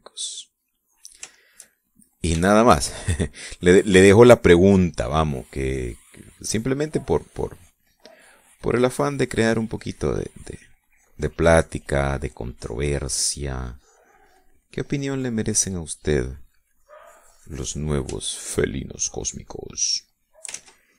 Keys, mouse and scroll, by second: 0.7-2.1 drag, 2.2 shift+middle click, 2.7 shift+middle click, 3.4-4.5 shift+middle drag, 6.0 click, 6.5-9.2 drag, 10.5-16.1 drag, 17.7 click, 20.6 click.